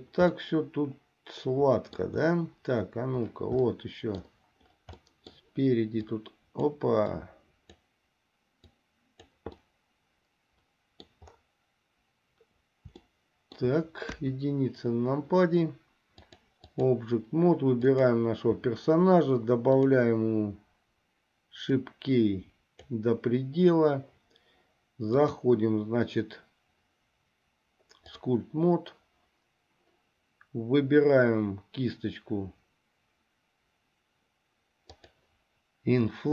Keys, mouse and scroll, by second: 0.6-2.3 middle drag, 3.8 middle click, 5.1 middle click, 6.1 click, 7.3 click, 8.9 click, 9.8-11.4 middle drag, 13.2 shift+middle click, 14.3 KP_1, 16.4 click, 17.9 click, 19.8 click, 21.8-23.1 drag, 25.4-28.6 drag, 35.1 click.